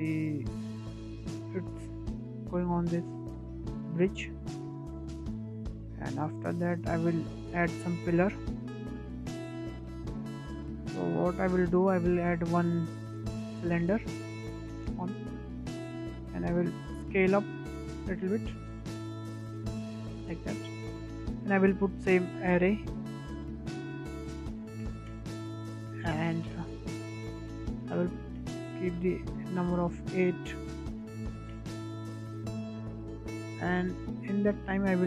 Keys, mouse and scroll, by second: 4.5 space, 4.9 click, 5.8 space, 6.9-7.5 drag, 7.5-9.6 shift+middle drag, 10.2-10.6 scroll down 2, 10.6 shift+middle click, 10.9-11.3 scroll up 4, 11.3 shift+middle click, 11.9 shift+a, 14.5-15.1 scroll down 7, 15.1 shift+middle drag, 15.4-16.0 scroll up 10, 16.0 shift+middle click, 16.3-18.3 scroll up 3, 18.3-19.6 drag, 21.2-21.6 scroll down 4, 21.6 shift+middle click, 22.4-27.2 drag, 27.6-30.6 drag, 31.7-33.3 drag, 33.3 scroll down 3, 33.5-35.0 shift+middle drag.